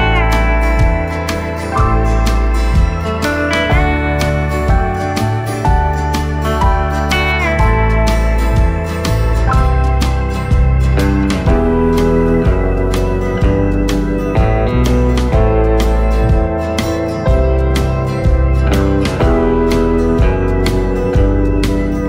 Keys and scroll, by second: 1.5 c, 2.1 v, 6.1 v, 10.2 v, 18.3 ctrl+shift+[.